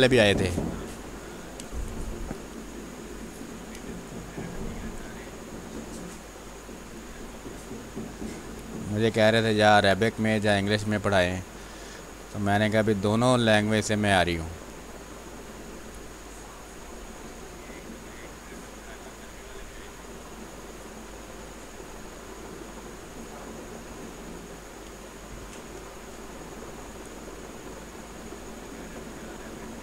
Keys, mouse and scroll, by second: 1.7 space, 2.0 ctrl+click, 2.4 r, 2.7 click, 3.7 b, 5.7-7.0 drag, 7.0-9.7 drag, 9.7 space, 9.9-11.5 drag, 11.5 space, 11.8 click, 12.1 space, 12.6-14.9 drag, 14.9-17.8 drag, 17.8 x, 19.7-21.3 drag, 21.3 space, 21.6 click, 21.8 space, 22.4-23.8 drag, 23.8 space, 23.9 click, 24.3 space, 24.7 ctrl+z, 25.1-26.7 drag, 26.7 space, 27.0 click, 27.2 space, 28.1-29.8 drag.